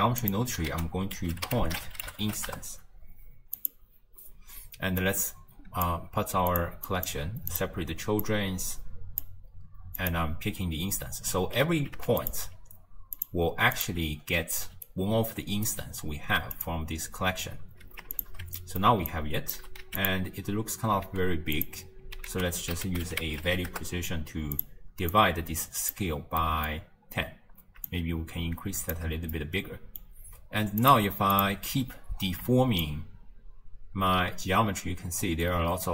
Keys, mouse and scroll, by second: 0.2 click, 0.7 ctrl+a, 5.0 click, 6.5 click, 6.9 click, 7.5 click, 8.3 click, 10.0 click, 11.0 scroll down 1, 12.2 alt+shift+click, 13.2 click, 13.8 click, 14.7 d, 14.9-15.7 right drag, 15.7 d, 16.6 click, 18.2 alt+shift+click, 18.6-19.1 middle drag, 19.1 click, 19.6 g, 21.1 z, 22.3 ctrl+a, 25.2 click, 26.4 middle click, 26.8-27.9 scroll up 1, 27.9-29.3 shift+drag, 29.3-30.8 middle drag, 30.8 click, 31.4 click, 32.9-35.9 shift+drag.